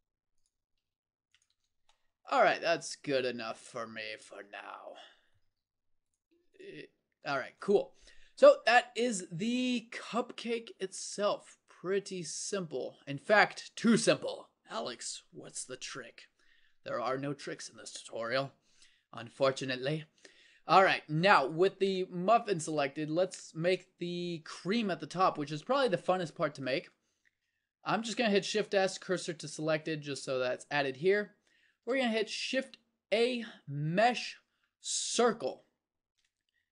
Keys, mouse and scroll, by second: 0.8 g, 1.6 Tab, 5.5 Tab, 6.9 g, 7.5 Tab, 8.3 middle click, 9.0 middle click, 18.8 KP_1, 20.6-23.4 middle drag, 28.6 shift+s, 31.0 a, 32.4 shift+a.